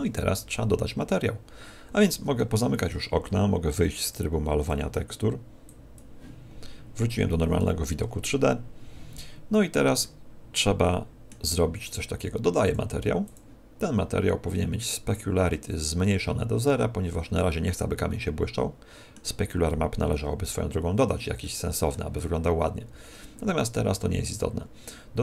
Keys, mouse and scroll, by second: 4.0 click, 5.6 click, 7.5 t, 10.0 middle click.